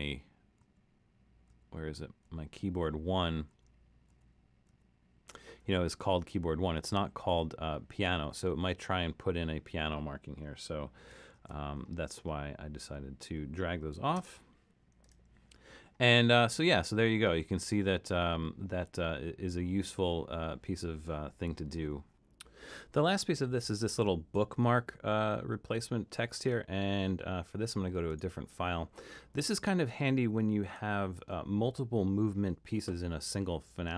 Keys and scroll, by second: 0.6 alt+super+., 1.4 alt+super+., 2.2 alt+super+., 2.8 alt+super+., 3.5 alt+super+., 4.1 alt+super+., 4.8 alt+super+., 11.3 super+,, 13.7-14.7 typing.